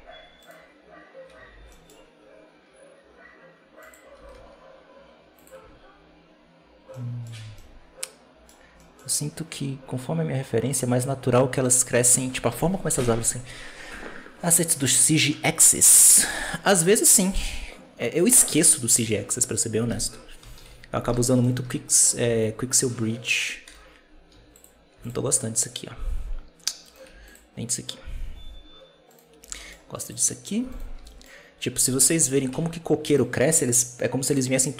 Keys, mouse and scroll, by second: 0.3-1.5 right drag, 1.5 alt+d, 4.0 r, 5.6 alt+a, 6.8-7.2 middle drag, 7.2 scroll down 1, 7.4-8.5 middle drag, 8.5-9.8 scroll up 2, 8.7 middle drag, 9.8-11.5 scroll up 1, 11.5-13.6 scroll down 1, 13.6-14.6 scroll down 1, 20.3 KP_7, 20.5 z, 21.1-22.1 shift+middle drag, 22.1 b, 23.5 KP_0, 24.2 z, 24.8 x, 26.8 right click, 27.0 x, 29.0 right drag, 29.3 g, 30.6 right click, 30.8 g, 32.2 g.